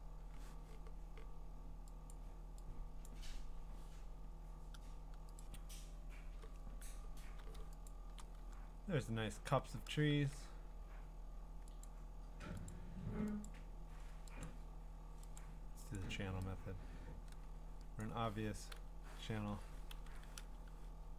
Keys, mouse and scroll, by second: 0.4-0.8 scroll, 2.1 click, 3.1 click, 5.4 click, 7.9 click, 8.1 click, 8.4 click, 8.5-9.8 scroll, 10.1 ctrl+d, 11.8 click, 12.7 click, 13.4 click, 14.4 click, 15.4 click, 15.9 click, 18.0 click, 19.9 ctrl+l.